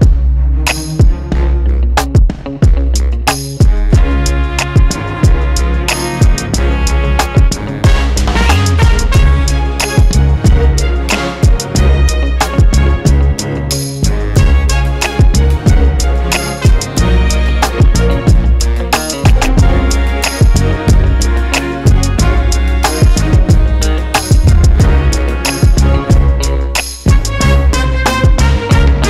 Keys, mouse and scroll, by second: 0.9-1.5 scroll up 2, 1.5 scroll up 1, 1.6-1.9 scroll down 2, 1.9-2.5 scroll up 2, 2.5 scroll up 1, 2.8-3.7 scroll down 2, 3.7-4.9 scroll down 1, 4.9-5.7 scroll down 1, 5.7-6.2 scroll down 1, 6.2-6.6 scroll up 2, 6.6 scroll down 1, 7.2 scroll down 1, 7.5 scroll up 1, 8.5 click, 8.9 KP_1, 10.4 click, 12.2 click, 12.4 KP_0, 12.8-13.5 scroll up 1, 14.2 scroll down 2, 14.4 alt+a, 14.6-15.9 scroll up 2, 15.9-16.2 scroll up 1, 16.2-16.7 scroll down 2, 16.7-17.4 scroll up 2, 17.4-18.5 scroll down 2, 18.5-19.2 scroll down 1, 19.2 scroll down 1, 23.2 click, 23.9 click, 25.0 click, 25.3 click, 26.5 click, 27.0 click, 27.7 click, 28.2 click, 28.5 scroll down 1, 28.8-29.0 scroll up 1.